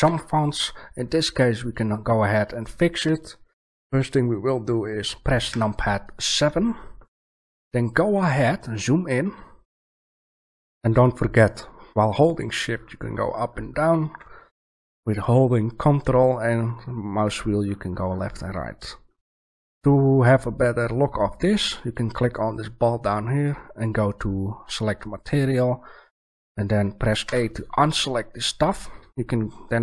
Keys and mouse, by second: 0.0 Escape, 5.4 KP_7, 12.4-14.0 middle drag, 27.2 a.